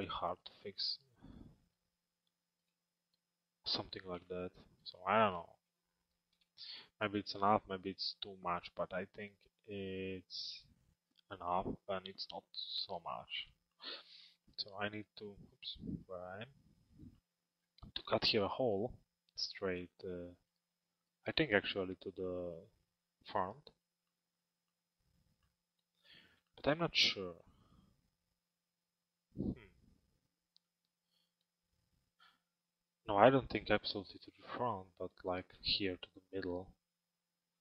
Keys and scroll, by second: 15.5 z.